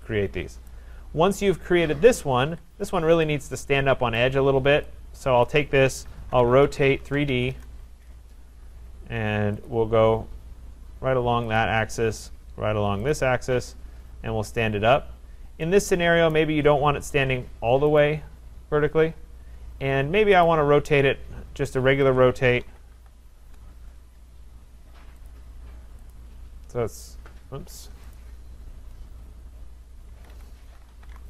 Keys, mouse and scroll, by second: 0.7 right click, 0.9-2.5 scroll, 2.5 Escape, 2.9-3.2 scroll, 4.2 right click, 5.5 click, 6.0-7.8 typing, 7.5 middle click, 9.7 click, 11.6 click, 13.1 click, 16.3 right click, 18.1 click, 20.5 right click, 21.9 Escape, 22.6 r, 23.0 o, 23.5 Return, 25.3 click, 26.2 click, 27.6 Escape, 28.2 right click, 30.2 Escape, 30.4 Escape, 30.7-31.2 typing.